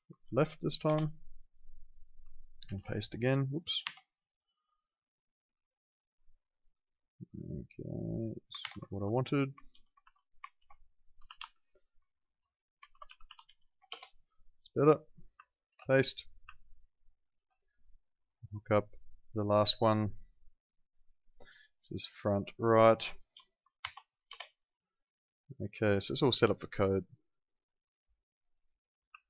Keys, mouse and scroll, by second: 0.2 shift+l, 0.8 Return, 0.8 KP_Enter, 2.6 ctrl+v, 3.8 Escape, 4.2 click, 8.6-14.0 typing, 15.1 click, 15.7 ctrl+v, 16.6 ctrl+click, 18.2 click, 23.8 shift+f, 24.3 Return, 26.7 click.